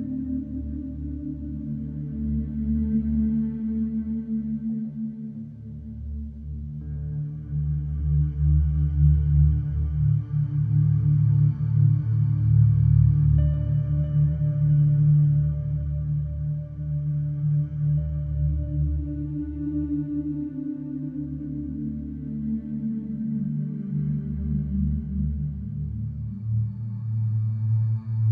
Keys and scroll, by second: 0.0 F1, 4.8 3, 12.4 Delete, 12.8 Delete, 14.2 4, 16.5 3, 19.4 4, 20.5 3, 22.1 ctrl+d, 22.2 Escape.